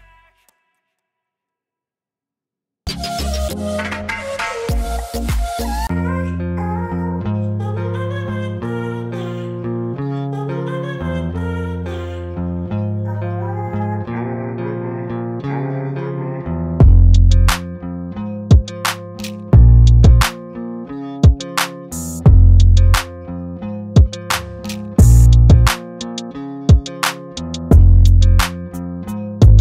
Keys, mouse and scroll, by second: 6.3 ctrl+d, 6.6-7.5 drag, 8.1 ctrl+d, 8.7 ctrl+d, 9.1 ctrl+space, 9.3-9.9 ctrl+click, 9.6 ctrl+space, 9.9 ctrl+click, 10.2-10.8 ctrl+space, 11.0 ctrl+alt+scroll up 2, 11.6-12.5 click, 12.5 ctrl+d, 12.9 space, 13.0-13.6 click, 13.4 space, 14.1-14.7 drag, 16.6 ctrl+d, 16.9 alt+scroll down 1, 17.2 space, 17.4-18.6 click, 17.7 space, 19.8-20.6 click, 20.7 ctrl+d, 21.2 alt+scroll down 1, 21.5-24.7 typing, 21.6-22.2 click, 22.4 click, 23.0 click, 24.7 alt+scroll down 1, 26.1 alt+click, 27.0 ctrl+space, 27.3 ctrl+click, 27.5-28.2 ctrl+space, 28.7 click, 28.9-29.3 space, 29.3 click, 29.4-29.6 space.